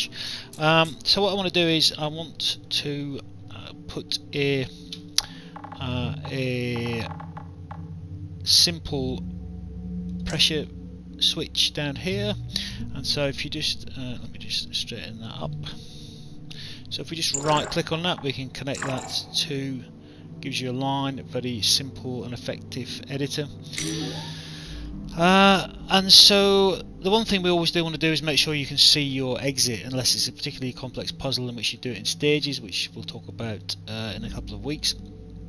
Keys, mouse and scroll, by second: 0.4 alt+click, 10.1 click, 12.2 click, 14.1 alt+middle click, 15.3 right click, 17.1 right click, 18.6 click, 23.7 click, 24.8 alt+click, 26.2 alt+click, 27.7 alt+click, 29.4 alt+click, 32.0 alt+click, 34.2 alt+click.